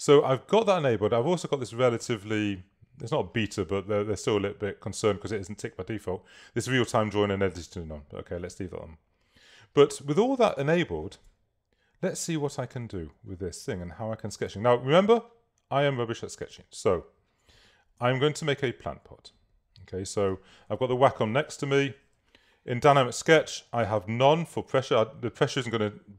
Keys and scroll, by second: 11.9 super+z, 15.9 super+z, 18.7 super+z.